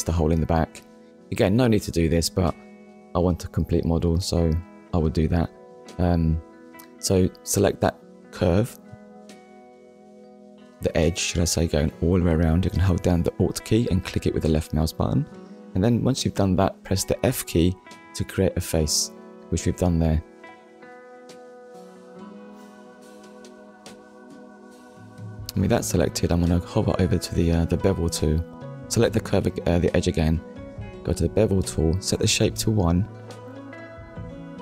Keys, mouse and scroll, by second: 1.6 click, 5.8 click, 7.1 middle click, 11.9 middle click, 13.8 click, 15.0 Tab, 15.6 middle click, 17.8 Tab, 18.5 click, 19.0 click, 19.9 click, 20.3 middle click, 23.2 click, 24.3 alt+click, 25.3 middle click, 28.8 click, 31.2 click, 34.1 click.